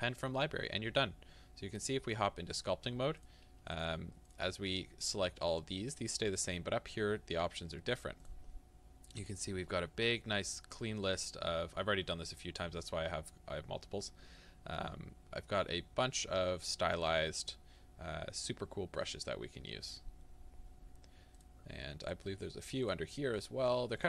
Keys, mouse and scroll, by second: 0.0-1.8 drag, 3.3-24.0 drag.